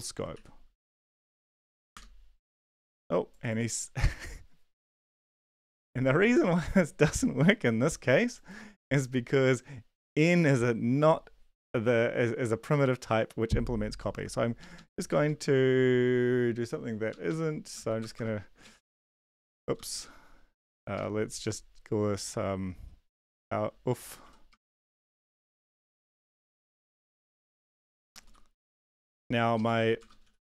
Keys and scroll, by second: 0.3 ctrl+`, 1.1 ctrl+l, 1.9 Up, 1.9 Return, 5.7 ctrl+`, 14.7 Up, 15.1 Down, 15.2 Down, 17.3 Up, 17.7 Left, 18.0 Return, 18.1 Return, 18.4-20.9 typing, 23.5-25.5 typing, 26.7-28.2 typing, 28.8 Down, 28.9 Down, 29.1 Down, 29.5 ctrl+Left, 29.7-30.4 typing.